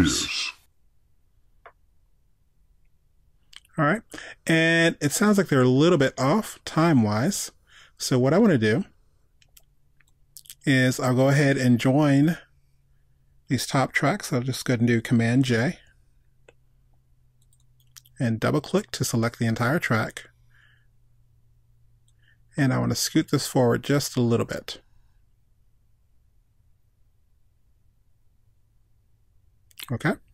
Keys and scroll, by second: 15.7 super+j.